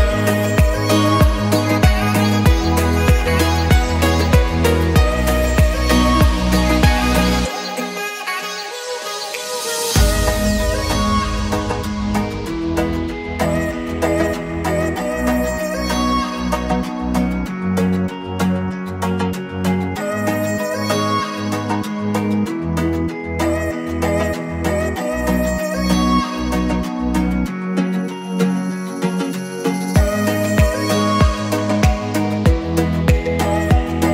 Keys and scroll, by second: 6.4 6, 6.6 2, 7.3 6, 7.7 Return, 8.5 Escape, 9.7 Escape, 17.2 Escape, 20.6 Escape, 25.4 Escape.